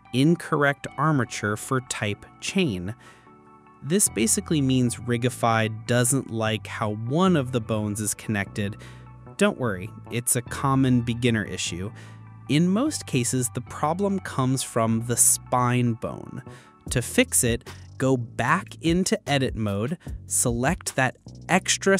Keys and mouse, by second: 5.4 click, 6.9 ctrl+z, 10.3 ctrl+z, 10.8 ctrl+z, 12.7 click, 14.1 click, 15.7-16.8 drag, 17.7 click, 18.6 x, 20.6-21.2 drag.